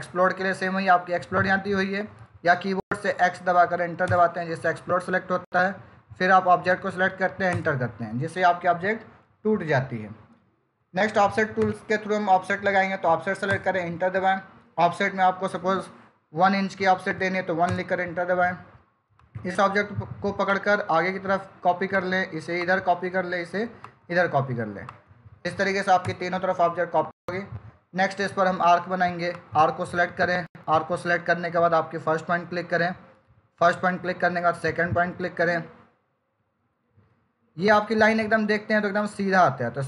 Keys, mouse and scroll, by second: 3.3 x, 3.9 Return, 6.5 click, 7.3 Return, 11.4 Return, 11.5 o, 13.3 Return, 17.5 Return, 19.0 click, 25.9 Return, 29.2 click, 33.4 click.